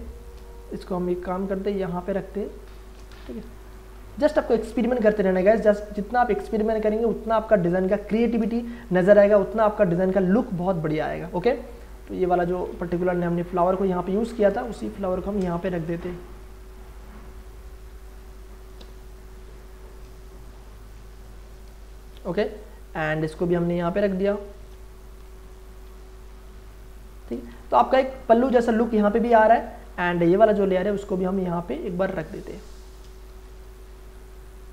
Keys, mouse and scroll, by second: 1.2-3.5 drag, 3.4 ctrl+t, 3.6 ctrl+right click, 4.6 click, 8.9 Return, 9.6-12.8 drag, 12.7 ctrl+z, 13.6 alt+click, 14.5 ctrl+space, 14.8 ctrl+click, 15.1 ctrl+space, 15.6 ctrl+t, 15.9 ctrl+right click, 16.9-19.8 drag, 19.8 Return, 20.8 Up, 21.7 Left, 22.6-25.2 alt+drag, 25.2 Down, 27.4 space, 27.6-30.6 ctrl+drag, 30.6-32.3 alt+drag, 32.2 ctrl+space, 32.4 ctrl+click, 32.7 ctrl+space, 33.2 ctrl+t, 33.7 right click.